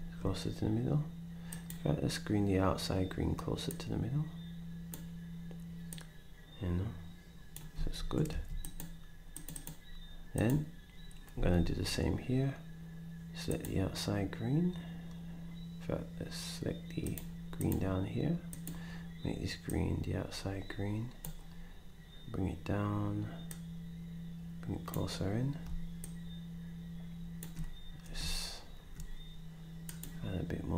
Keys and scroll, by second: 7.7 d, 8.3 s, 11.3 d.